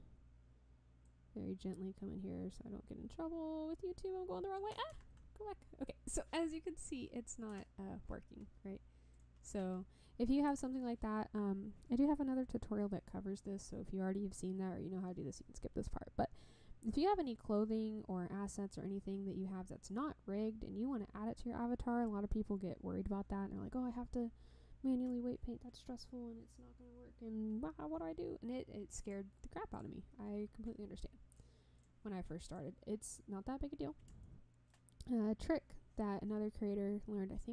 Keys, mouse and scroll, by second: 1.0-4.7 drag, 5.0 ctrl+z, 7.7 Tab, 9.1 click, 10.6 Tab, 29.0 click, 29.7 click, 31.3-31.8 drag, 32.5 click, 34.2-34.7 shift+middle drag, 35.1 scroll up 1.